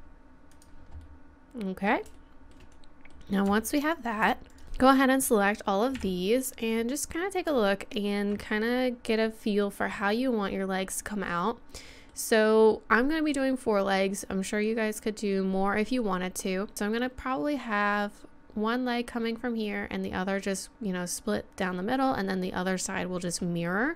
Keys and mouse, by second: 1.9-2.9 middle drag, 3.0 middle click, 3.8-5.9 right drag, 4.6 ctrl+z, 5.9 KP_1, 14.1 middle click, 14.5 middle click, 16.4-20.3 middle drag.